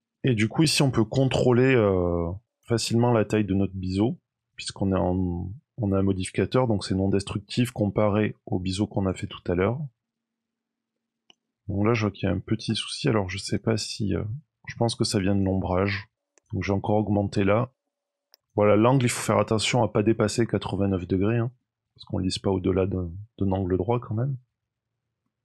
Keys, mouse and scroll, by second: 2.0 shift+click, 9.3-10.3 scroll up 2, 9.7 middle click, 10.9-11.2 scroll up 1, 11.7 middle click, 13.3 click, 15.2 click, 17.3 click, 20.4-21.7 scroll down 3, 20.9 middle click, 21.8 shift+middle click, 22.7 middle click, 23.5 middle click, 24.3-24.8 scroll up 2, 24.8-25.4 scroll down 3, 25.2 middle click.